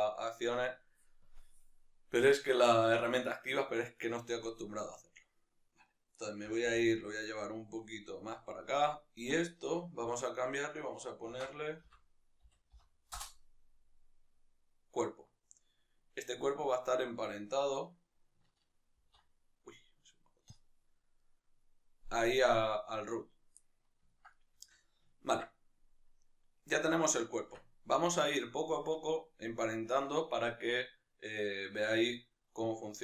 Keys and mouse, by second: 4.0-6.5 right drag, 6.5 g, 8.3 click, 8.8-13.2 right drag, 13.2 F2, 16.8 shift+right click, 20.5 ctrl+p, 21.2 right click, 23.7-32.9 middle drag, 27.6 Tab, 32.9-33.0 right drag.